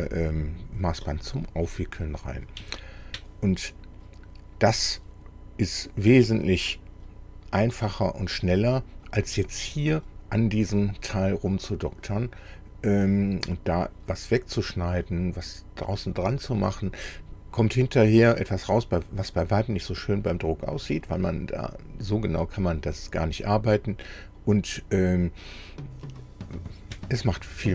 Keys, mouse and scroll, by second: 1.7 click, 2.8 shift+click.